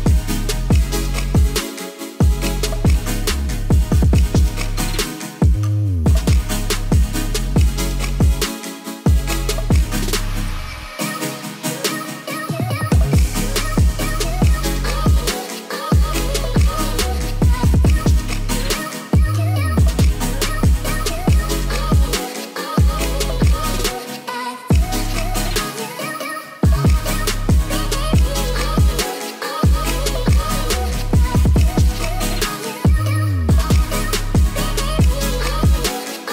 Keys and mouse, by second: 3.4 click, 4.4 ctrl+s, 5.1 click, 6.2 middle drag, 6.6 ctrl+s, 7.8 shift+middle drag, 9.8 click, 10.5-11.6 drag, 12.0-14.2 drag, 16.1 shift+middle click, 16.6 ctrl+s, 18.0-19.7 drag, 20.4 ctrl+s, 21.8 click, 23.2 ctrl+s, 24.6 middle drag, 25.7 KP_Decimal, 27.4-30.1 drag, 32.0 click, 32.6-36.0 drag, 34.4 s.